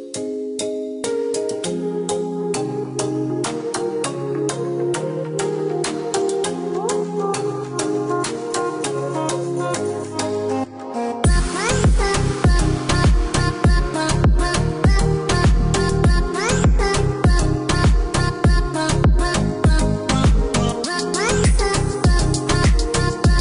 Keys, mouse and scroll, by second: 0.1 click, 2.3 click, 3.7 click, 5.2 Escape, 6.9 click, 8.5 click, 9.4 KP_7, 10.2 KP_8, 10.7 KP_Enter, 11.3 Escape, 13.7 click, 15.5 click, 16.9 click, 17.9 click, 18.7 KP_9, 19.0 KP_Enter, 19.5 Escape, 20.6 click.